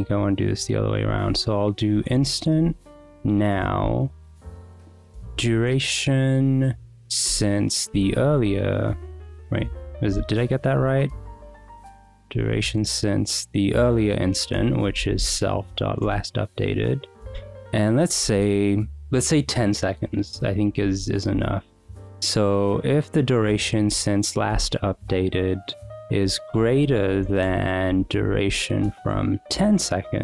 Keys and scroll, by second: 0.2-5.6 typing, 0.5 Escape, 3.5 Return, 7.3 Return, 7.6-10.9 typing, 11.6 Escape, 12.1 d, 12.5 u, 14.5 Return, 14.6-15.8 typing, 16.0 Return, 16.6 Escape, 16.9-18.5 typing, 18.5 Escape, 21.1 shift+a, 21.3 space, 24.8 Right, 26.2-30.2 typing.